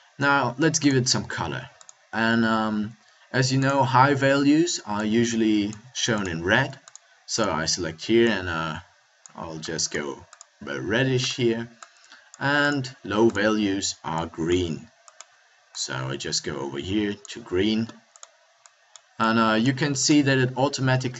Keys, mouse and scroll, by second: 5.5 middle click, 9.3-10.3 middle drag, 20.0-21.1 middle drag.